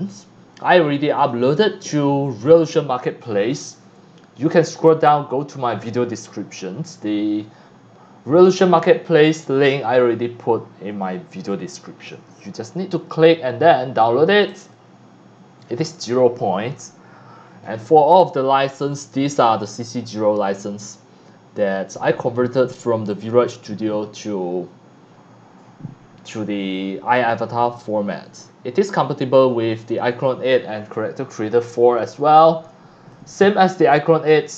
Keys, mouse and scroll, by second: 1.2 click, 3.2 scroll up 1, 8.4 click, 10.9 click, 28.3 click, 29.4 scroll up 1, 30.6 scroll down 1, 31.1 scroll up 1, 32.1-33.1 drag, 32.1 x, 32.7 c.